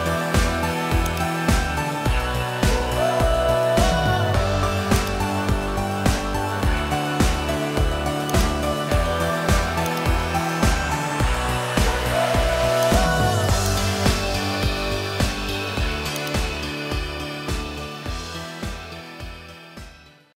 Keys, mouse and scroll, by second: 2.2 ctrl+Tab, 3.1 middle click, 4.3 middle click, 5.0 click, 5.5 g, 10.4 g, 14.0 g, 16.6-18.0 middle drag.